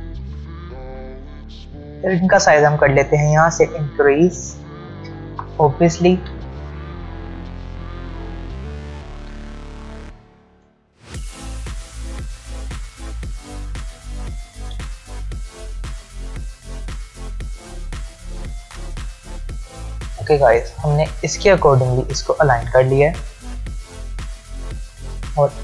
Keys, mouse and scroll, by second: 2.8 click, 8.5 click, 11.0-13.2 click, 13.7-14.5 alt+scroll down 1, 15.5 shift+click, 24.0 click.